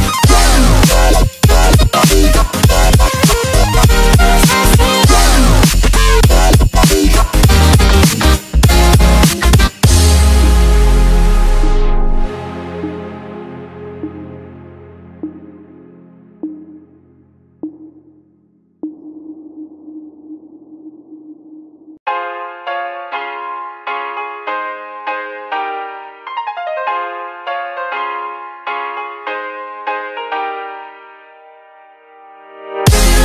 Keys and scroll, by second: 7.5 ctrl+z.